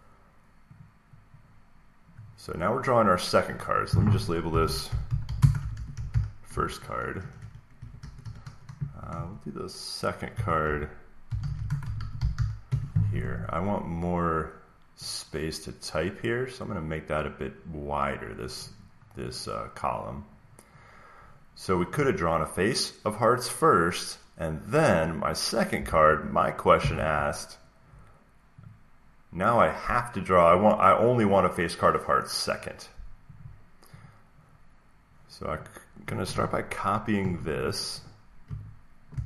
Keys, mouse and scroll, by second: 0.8-2.8 drag, 3.5-5.5 drag, 4.2-6.5 typing, 7.1 Down, 7.3 Down, 8.1 Up, 8.7 Right, 9.0 Right, 10.0-12.7 typing, 16.5 click, 18.5 click, 21.7 click, 24.9 click, 25.8 alt+Tab, 26.7 alt+Tab, 28.6 click, 30.5 click, 33.3 click, 33.9 click, 35.5 click, 37.1 ctrl+c, 38.0 click, 39.0 ctrl+v.